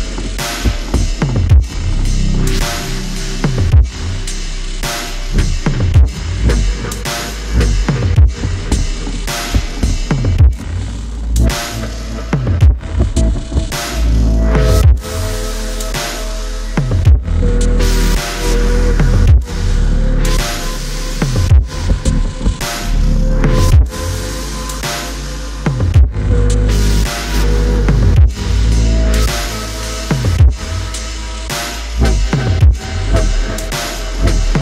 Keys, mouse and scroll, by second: 9.9 right click, 10.9 right click, 12.9 ctrl+j, 23.9 alt+scroll up 1, 30.1 alt+click, 31.0 alt+click, 32.3 alt+scroll up 1.